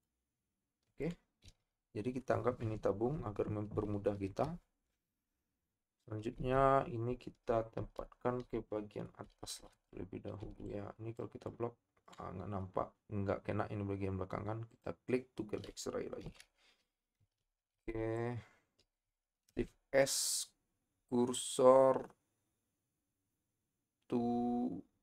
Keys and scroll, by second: 7.8 Tab, 10.4 b, 17.2 a, 17.7 b, 19.5 shift+s.